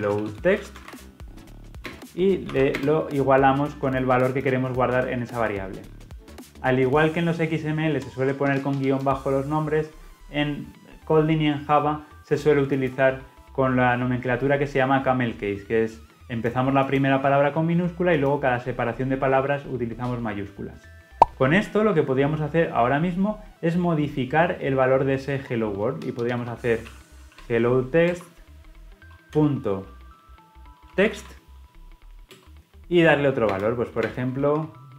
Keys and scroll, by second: 28.0 Return, 32.3 Return.